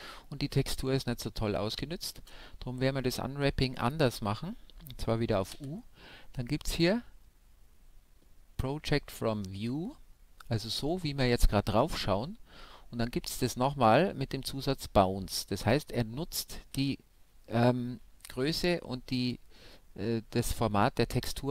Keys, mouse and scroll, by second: 2.9 u, 19.9-21.5 middle drag.